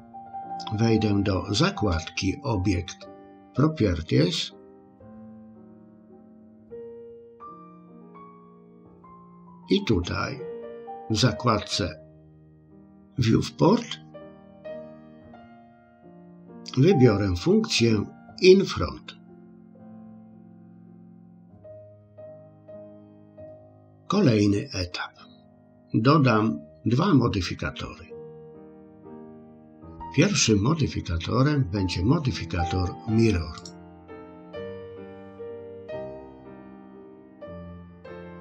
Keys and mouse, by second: 19.5 click, 21.8-23.1 middle drag, 33.6-35.7 drag, 38.1 click.